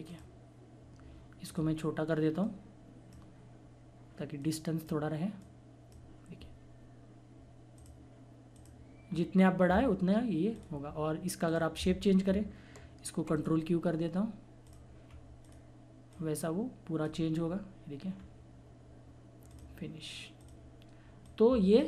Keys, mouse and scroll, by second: 9.1 scroll down 1, 10.5 click, 13.3 right click, 14.6 click, 15.0 scroll up 1, 15.4 click, 17.4 scroll down 1, 19.5 click.